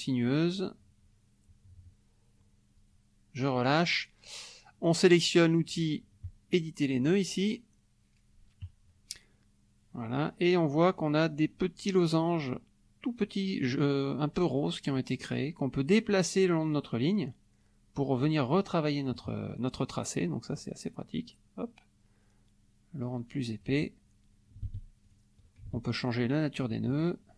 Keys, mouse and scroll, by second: 4.6 middle click, 6.2 click, 14.9-19.1 drag, 20.5-23.8 drag, 25.0 ctrl+click, 26.0 ctrl+click.